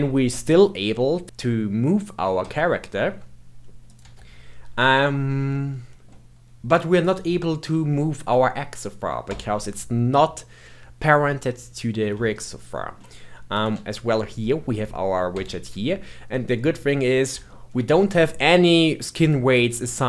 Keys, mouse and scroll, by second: 3.8 click, 4.0 g, 5.0-5.5 scroll up 2, 5.5-6.9 shift+middle drag, 6.9 click, 7.1 g, 11.6-12.3 scroll down 1, 12.3-13.5 shift+middle drag, 13.5 click, 13.7 g, 16.3-17.0 middle drag, 17.0-17.4 scroll up 2, 17.4-20.0 shift+middle drag.